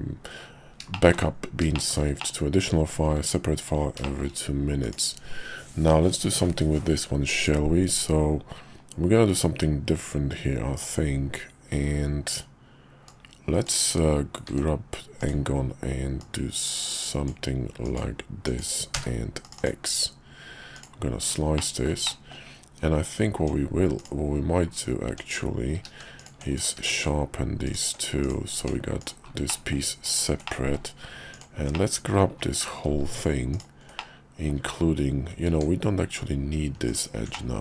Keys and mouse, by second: 0.3 KP_5, 0.9 shift+middle click, 1.7 shift+middle click, 2.2 middle click, 3.2 `, 4.0 shift+middle click, 4.8 click, 13.1 click, 14.5 d, 16.2-17.3 drag, 20.7 click, 21.5 shift+middle click, 22.0 middle click, 23.4 Tab, 24.0 click, 25.1 Tab, 25.7 q, 26.5 click, 26.8 q, 28.2 click, 28.6 Tab, 29.0 click, 29.5 middle click, 30.1 ctrl+click, 30.4 middle click, 31.3 ctrl+click, 31.7 middle click, 33.5 ctrl+click, 34.0 middle click, 35.5 Tab, 36.8 alt+click, 37.3-37.6 middle drag.